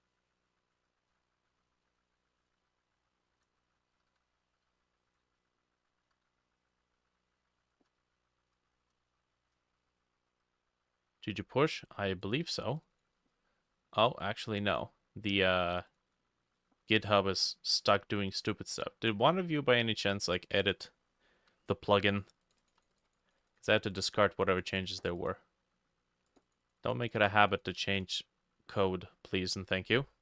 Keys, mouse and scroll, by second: 1.2 Tab, 1.6 middle click, 1.9 s, 2.7-4.1 alt+middle drag, 4.0 g, 4.2 y, 4.6 x, 6.2 g, 6.4-12.0 drag, 6.4 x, 6.7-8.2 shift+middle drag, 8.1 z, 8.7 shift+middle click, 9.1-9.4 scroll up 3, 9.7 shift+middle click, 13.0-17.7 drag, 20.6-30.2 drag.